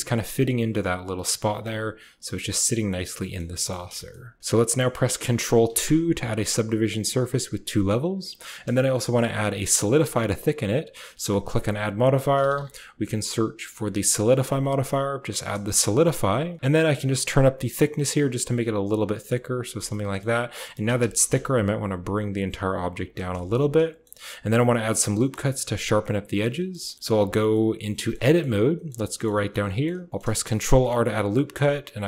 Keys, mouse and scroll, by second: 0.5 middle click, 1.3 click, 1.5-2.0 middle drag, 2.0 click, 2.6-3.3 drag, 3.6 drag, 3.9 shift+click, 5.6 ctrl+2, 6.4-6.9 drag, 8.6 shift+click, 10.1 click, 11.3-14.8 drag, 14.8-15.3 middle drag, 15.5 shift+middle click, 17.2-19.6 shift+drag, 19.8 middle click, 20.5 shift+middle click, 20.8 g, 22.9 g, 23.3 a, 23.4 click, 24.2 click, 24.6 click, 25.3 shift+click, 26.9 shift+click, 27.1 Tab, 27.4 click, 28.1 shift+click, 28.4 shift+click, 29.0 click, 29.2 shift+click, 29.5 shift+click, 30.6 ctrl+r.